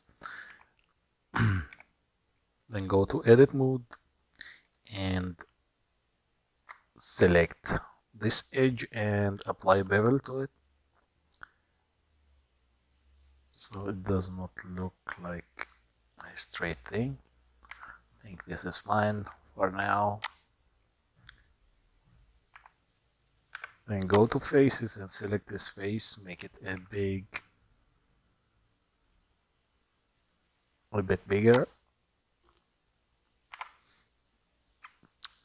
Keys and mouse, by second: 0.8 Tab, 1.8 2, 3.2 click, 5.2 alt+shift+click, 5.6 alt+shift+click, 9.9 ctrl+b, 17.9 Tab, 18.5 middle click, 19.9 q, 21.4 middle click, 22.7 Tab, 23.8 3, 25.0 middle click, 26.8 s, 33.6 Tab.